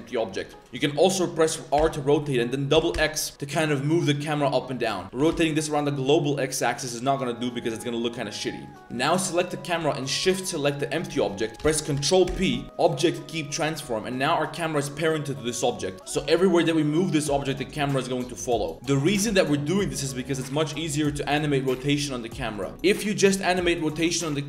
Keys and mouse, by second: 0.0 click, 0.6 click, 8.3 middle click, 9.2 click, 10.3 shift+click, 14.0 click, 14.6 middle click, 14.8 middle click, 15.2 middle click, 23.6 click.